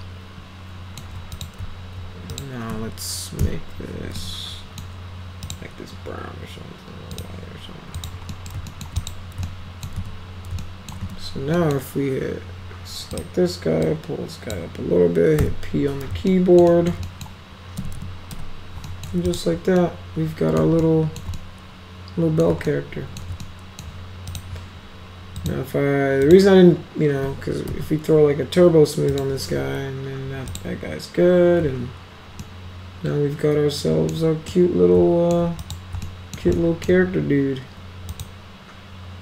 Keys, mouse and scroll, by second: 1.3 click, 2.3 click, 3.4 m, 4.2 middle click, 5.4 click, 7.1 click, 8.0 click, 8.3 middle click, 8.7 alt+middle click, 9.0 click, 9.4 alt+middle click, 9.9 z, 10.6 alt+middle click, 11.0 z, 11.6 middle click, 13.1 click, 13.8 click, 15.4 p, 16.3-16.6 alt+middle drag, 16.7 alt+middle click, 17.1 right click, 17.8 F3, 18.0 F3, 18.3 F4, 18.8 right drag, 19.3 click, 19.8-20.6 alt+middle drag, 20.8 ctrl+alt+middle click, 21.4-22.4 middle drag, 22.6 ctrl+alt+middle click, 23.4 middle click, 24.3 click, 25.4 click, 26.2 click, 27.7 t, 29.1 click, 30.5 click, 32.4-34.1 alt+middle drag, 34.5-35.3 middle drag, 35.6 click, 36.0 alt+middle click, 36.5 alt+middle click, 38.1 click.